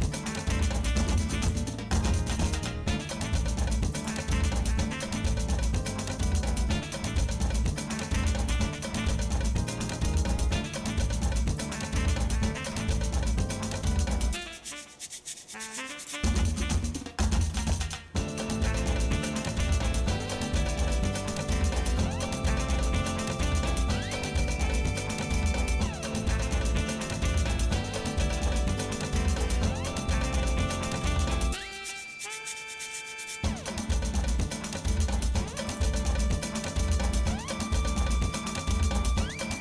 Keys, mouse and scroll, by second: 2.4 alt+m, 4.6-7.3 shift+middle drag, 8.1 shift+middle click, 8.9 ctrl+Tab, 11.6 click, 12.6 ctrl+KP_Add, 13.8 g, 16.2 Tab, 16.6-16.9 scroll down 1, 17.1 shift+middle click, 17.7 middle click, 18.1 scroll down 1, 18.1 scroll up 1, 18.4 middle click, 18.9 shift+middle click, 19.4 middle click, 20.0 shift+middle click, 20.9 middle click, 21.6 shift+middle click, 22.4 click, 22.7 Tab, 23.3 middle click, 23.9 scroll up 1, 24.5 middle click, 28.3 ctrl+Tab, 30.9 ctrl+r, 36.4-37.7 shift+middle drag, 38.3 KP_Divide, 39.1 shift+middle click.